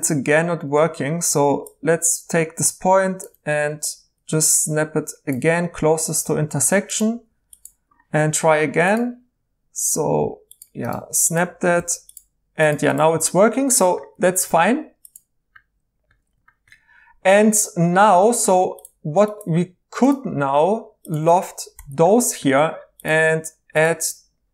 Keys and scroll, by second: 0.7 1, 7.1 2, 11.8 alt+j, 21.7 i.